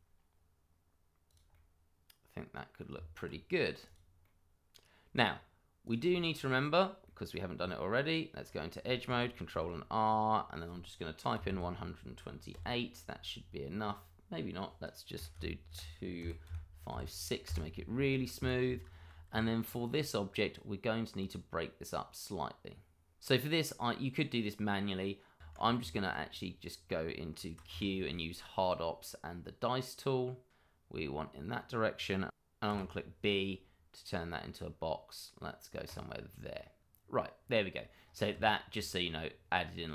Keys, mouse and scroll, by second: 1.2 click, 1.5 middle click, 2.9 Tab, 3.5-3.8 scroll down 1, 3.8 click, 4.2 middle click, 5.2 scroll up 1, 5.8 click, 6.1 shift+middle click, 6.2 middle click, 6.3 shift+middle click, 7.0 middle click, 7.5 Tab, 9.5 ctrl+r, 10.0-11.3 scroll up 1, 11.3 1, 11.4 2, 12.5 8, 15.1 BackSpace, 16.2 2, 16.4 5, 16.9 6, 17.4 Return, 18.3 Escape, 18.9 shift+middle click, 18.9 middle click, 19.3 Tab, 19.8 click, 23.7-24.5 scroll up 1, 25.4 Tab, 26.5 q, 29.9 click, 32.6 b, 34.3-35.8 scroll up 1, 35.8 click, 37.0-37.4 scroll down 1, 38.0 scroll up 1, 38.3 Tab, 39.0-39.4 scroll up 1.